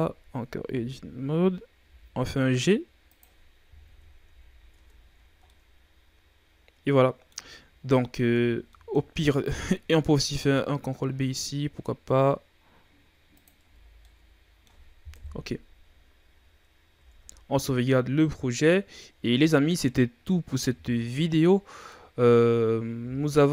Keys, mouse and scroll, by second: 0.2-0.5 scroll up 5, 0.5 z, 1.7 g, 3.8 KP_3, 4.2 z, 4.7 Tab, 5.0-5.3 scroll down 5, 5.3-7.4 middle drag, 7.4-7.8 scroll up 4, 7.8-8.2 middle drag, 8.2 Tab, 8.6-10.3 middle drag, 10.3 ctrl+b, 13.5 Tab, 13.8 scroll down 1, 14.0-15.1 middle drag, 15.1 KP_1, 15.8-16.9 scroll down 3, 16.9 ctrl+s, 17.7-19.4 shift+scroll up 7, 19.4 scroll down 3, 20.2-21.1 scroll down 4, 21.1-21.4 scroll down 3, 21.4-23.5 middle drag.